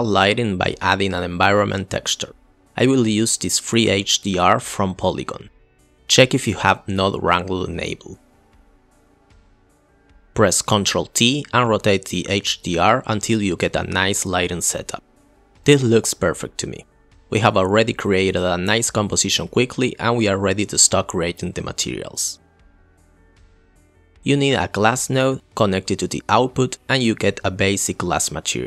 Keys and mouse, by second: 1.1-1.5 drag, 7.0 click, 10.3 click, 11.4 ctrl+t, 13.0-15.5 drag, 15.6-16.7 drag, 23.6 click, 23.7 Delete, 24.1 Delete, 24.9-25.4 drag.